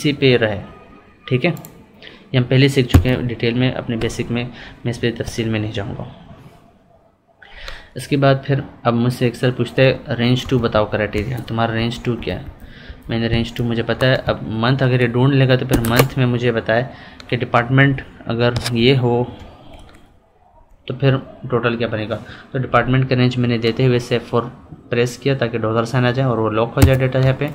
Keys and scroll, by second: 10.4 F2, 11.7 Left, 13.3 Up, 18.5 F4.